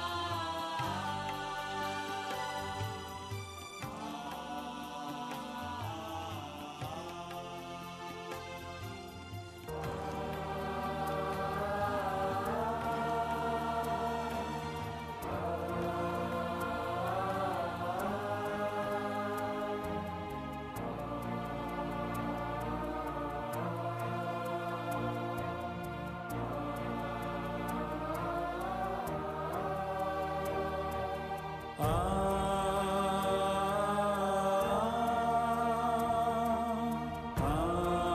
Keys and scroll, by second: 0.4 ctrl+KP_Subtract, 1.0 space, 23.7 space, 25.0 ctrl+space, 25.3 ctrl+shift+[, 25.5 ctrl+shift+], 26.0 ctrl+], 26.7 ctrl+], 28.1 ctrl+], 29.3 ctrl+], 29.8 ctrl+[, 29.9 ctrl+[, 31.7 space, 33.1 space, 34.7 space, 37.8 ctrl+shift+].